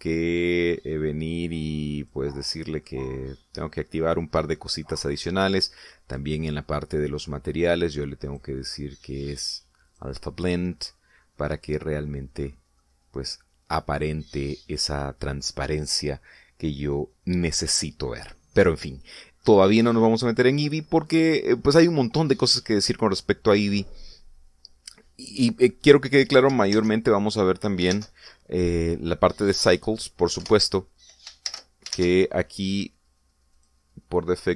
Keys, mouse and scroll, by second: 3.0 click, 3.8-4.8 middle drag, 4.9 scroll up 1, 5.5 middle click, 7.2 click, 7.6-8.2 scroll down 2, 9.3 click, 10.9 click, 11.8-13.6 middle drag, 13.8-14.5 middle drag, 14.8 scroll up 1, 15.6 scroll down 2, 19.8-20.4 scroll down 2, 27.8 shift+z, 29.0 shift+z, 29.6 scroll up 2, 30.0 scroll down 2, 30.3 middle click, 31.4 0, 32.5 shift+z.